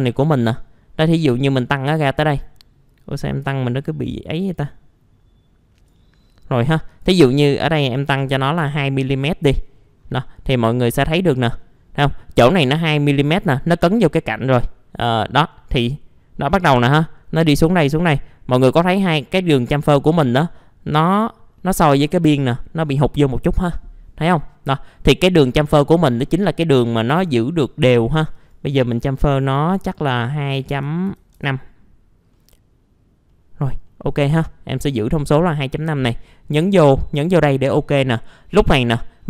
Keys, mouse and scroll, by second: 1.4 middle click, 3.1-7.1 drag, 8.2 KP_2, 9.2 middle click, 9.6-10.1 scroll down 1, 10.1 middle click, 12.3-12.6 scroll up 1, 12.6 middle click, 18.0-20.6 middle drag, 21.2-21.6 scroll down 1, 21.6 middle click, 24.5 scroll down 1, 24.8 middle click, 26.8-27.7 scroll up 1, 28.1 click, 30.6 KP_2, 30.7 KP_Decimal, 31.0 KP_5, 32.3 middle click, 34.6 scroll down 1, 37.2 click, 38.6 middle click, 38.9 scroll down 1.